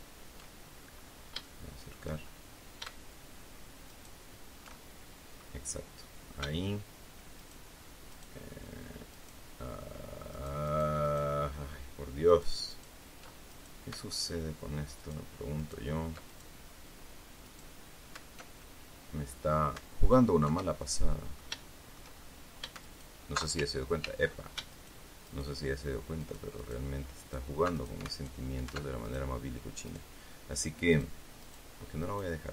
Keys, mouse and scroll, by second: 0.7-1.2 scroll up 2, 1.3 shift+middle click, 2.1-2.7 shift+scroll up 1, 3.8 alt+shift+right click, 4.6 alt+shift+middle click, 7.3 alt+shift+right click, 8.0 alt+shift+right click, 9.0 alt+shift+right click, 10.2 alt+shift+right click, 12.2 alt+shift+right click, 12.6 alt+shift+right click, 13.4 alt+shift+right click, 14.1 alt+shift+right click, 14.9 alt+shift+right click, 15.5 alt+shift+right click, 16.2 alt+shift+right click, 17.4 shift+right click, 18.5-19.6 alt+shift+middle drag, 20.7 alt+shift+middle click, 22.7 alt+shift+right click, 23.9 ctrl+z, 24.6 ctrl+alt+shift+right click, 25.2 alt+shift+right click, 26.1 alt+shift+right click, 26.5 alt+shift+right click, 27.1 alt+shift+right click, 27.7 alt+shift+right click, 28.0 alt+shift+right click, 28.9 alt+shift+right click, 29.8 shift+right click, 30.8 shift+right click, 31.3 shift+right click, 31.9 shift+right click.